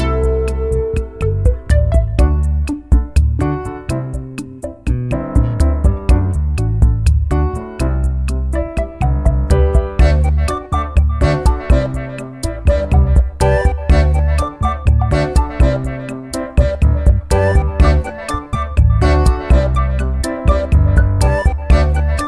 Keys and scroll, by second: 16.2 ctrl+alt+shift+e.